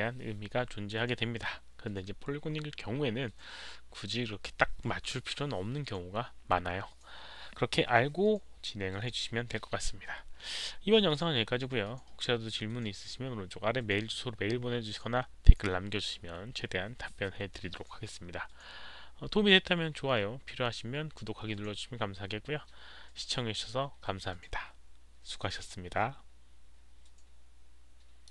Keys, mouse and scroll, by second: 28.2 click.